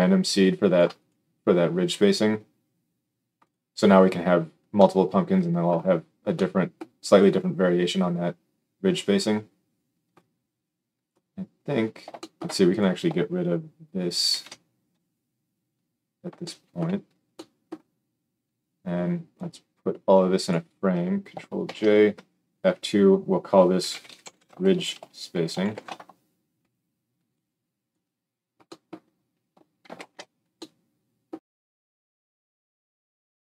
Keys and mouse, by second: 3.5-10.1 middle drag, 10.1-12.7 drag, 12.7-19.3 ctrl+middle drag, 14.3 ctrl+x, 19.3-33.5 drag, 21.6 ctrl+j, 22.1 F2, 29.9 ctrl+alt+space.